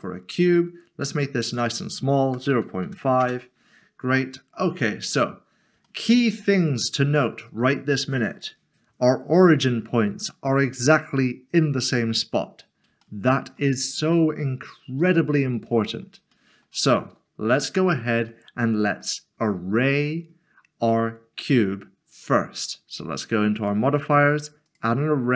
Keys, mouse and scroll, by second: 0.0 click, 2.3-2.8 typing, 3.2 Return, 4.2 middle click, 4.8 shift+middle click, 5.5 scroll up 1, 6.5 middle click, 6.7-7.9 scroll down 1, 7.9 click, 11.6 click, 13.2 shift+middle click, 15.0 click, 15.7 middle click, 16.3 shift+middle click, 17.5 middle click, 19.0 shift+middle click, 23.6 click.